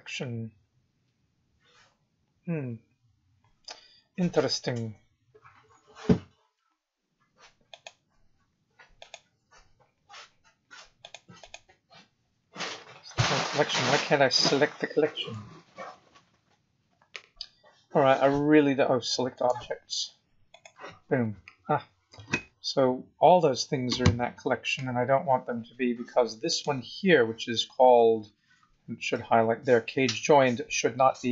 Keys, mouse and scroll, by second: 7.7 click, 8.9 click, 11.0 click, 11.4 click, 12.7-13.1 scroll down 2, 13.2 scroll up 2, 14.3 click, 15.1 right click, 19.3 right click, 22.5-23.4 scroll down 8, 23.6-23.9 scroll up 5, 26.4 click, 27.8-28.7 scroll down 15, 29.2 scroll down 2.